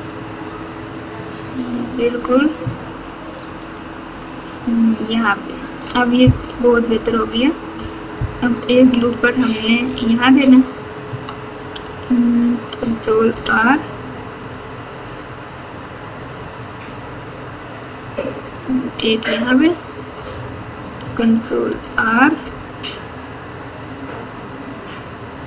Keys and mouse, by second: 5.6 click, 6.4 KP_4, 6.6 KP_4, 7.0 KP_4, 7.1 KP_4, 8.7 KP_6, 9.0 KP_6, 9.8 KP_8, 11.8 alt+z, 13.2 ctrl+r, 21.6 ctrl+r.